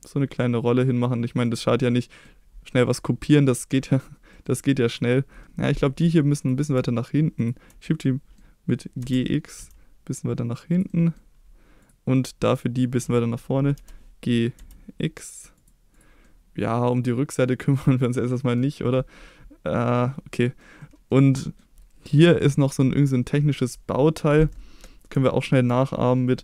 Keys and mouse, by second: 1.5 click, 1.8-2.3 middle drag, 2.7-4.1 middle drag, 4.3 middle click, 4.9 click, 6.4 click, 7.4 shift+click, 8.1 middle drag, 9.0 g, 9.6 x, 10.8 drag, 10.9 middle drag, 11.8 click, 12.6-13.0 middle drag, 13.8 g, 14.6 x, 15.6 click, 16.0 click, 16.3-17.5 middle drag, 17.8-18.6 middle drag, 20.3 middle drag, 20.8 middle drag, 21.4 middle drag.